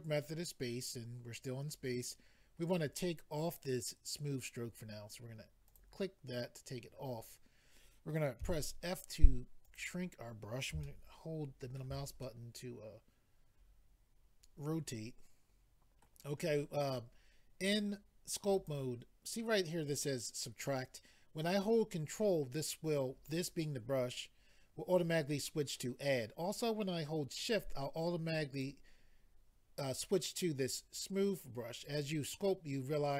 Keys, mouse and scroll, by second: 5.7 click, 5.8 click, 8.4 f, 9.6 click, 10.8 shift+middle click, 12.2 middle click, 17.7 click, 28.5 click, 28.6 click, 31.8 click, 31.9 click.